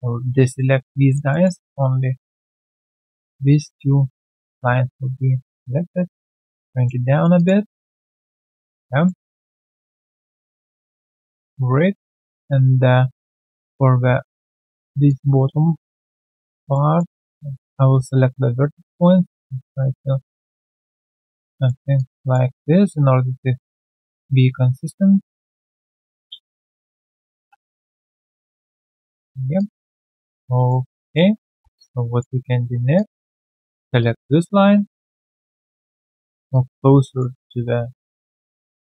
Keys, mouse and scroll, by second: 0.9 alt+click, 1.3 alt+middle click, 2.9 alt+middle click, 4.3 alt+middle click, 6.9 click, 7.1 alt+right click, 7.6 alt+middle click, 7.9 alt+click, 8.4 alt+right click, 8.6 alt+middle click, 11.2 alt+click, 12.2 right click, 14.2 alt+q, 14.7 alt+middle click, 15.0 alt+click, 15.7 shift+click, 16.1 alt+middle click, 16.4 alt+click, 16.7 alt+middle click, 17.1 alt+click, 17.9 r, 20.7 alt+middle click, 21.0 alt+right click, 21.2 alt+click, 21.6 alt+middle click, 21.9 alt+click, 23.8 alt+click, 24.0 alt+middle click, 25.4 alt+click, 26.9 right click, 27.2 scroll down 1, 27.5 3, 27.8 alt+click, 28.6 right click, 30.1 alt+middle click, 30.4 alt+click, 30.8 alt+right click, 31.0 alt+click, 31.7 alt+right click, 32.0 alt+click, 32.4 alt+right click, 32.9 alt+click, 33.5 double click, 33.7 w, 33.9 alt+click, 34.8 alt+click, 36.5 alt+click, 38.3 alt+click, 38.5 alt+middle click.